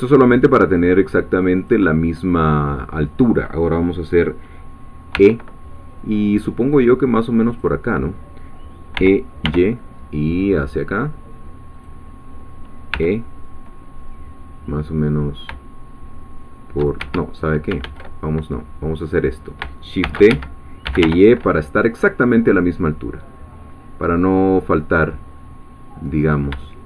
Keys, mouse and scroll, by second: 1.6 shift+click, 5.1 e, 7.5-8.9 drag, 8.9 e, 9.5 y, 11.7 click, 12.9 e, 17.0 shift+Escape, 17.8 ctrl+z, 19.1 click, 20.0-21.5 typing, 20.3 Escape, 26.1 click.